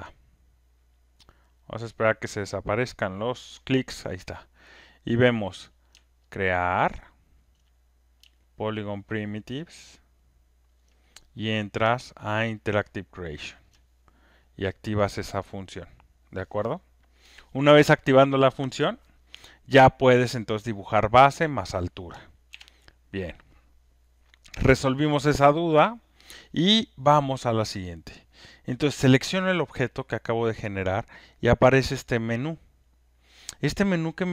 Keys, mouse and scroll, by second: 0.0 ctrl+F1, 3.4 scroll, 7.4 ctrl+click, 10.7 click, 10.8 ctrl+click, 13.6 ctrl+click, 18.8 ctrl+F1, 22.5 ctrl+F1, 30.8 click, 31.0 click.